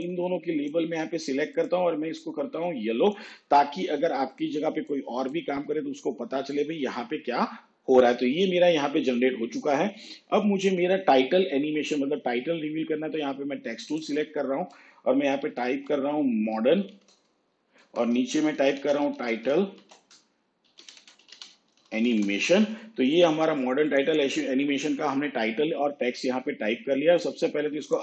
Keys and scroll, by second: 15.5 shift+m, 16.0 shift+t, 17.2 shift+n, 18.1 Return, 18.6-22.7 typing.